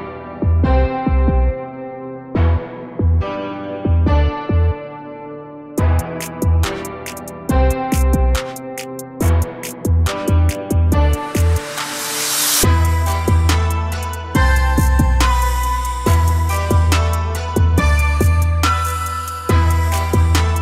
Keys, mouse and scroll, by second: 2.8 Tab, 3.5 a, 3.7 a, 4.0 a, 4.9 p, 6.6 a, 6.7 a, 7.0 Tab, 7.3 a, 7.5 a, 8.4-8.9 scroll down 1, 8.9-11.4 shift+middle drag, 11.4-12.1 scroll up 2, 12.1 click, 13.1 g, 16.4 a, 16.6 a, 16.9 click, 17.7 g, 20.5 click.